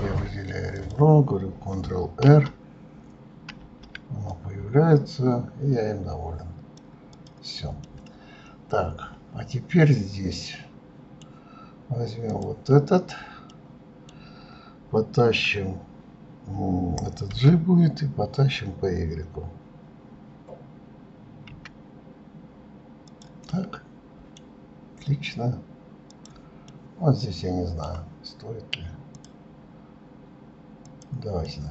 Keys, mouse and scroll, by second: 0.9 click, 2.4 ctrl+r, 3.8 ctrl+r, 7.3 click, 8.0-11.0 middle drag, 12.4 click, 13.7-16.7 middle drag, 23.7 middle click, 24.6 scroll down 2, 26.2 click, 26.8-29.3 middle drag, 29.3 click, 31.0 click, 31.6-31.7 middle drag.